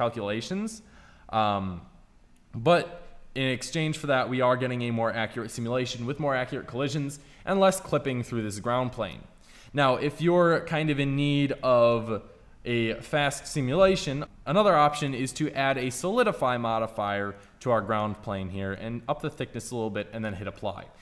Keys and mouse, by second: 3.5-5.8 middle drag, 10.6-11.8 drag, 11.8 KP_Enter, 14.0 click, 14.4 right click, 18.6-20.5 drag.